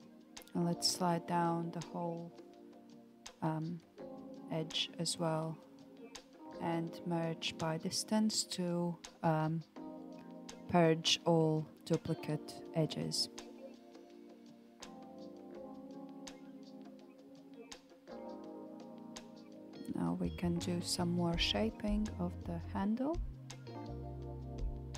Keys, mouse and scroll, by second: 2.6-4.7 scroll up 2, 4.7 alt+click, 6.6 g, 9.7 a, 10.1 m, 12.1-14.1 shift+middle drag, 14.1 alt+z, 15.3 alt+z, 17.0 alt+click, 17.5 middle click, 18.4 alt+click, 20.0 click, 21.7 KP_7, 23.1 KP_1, 24.6 g.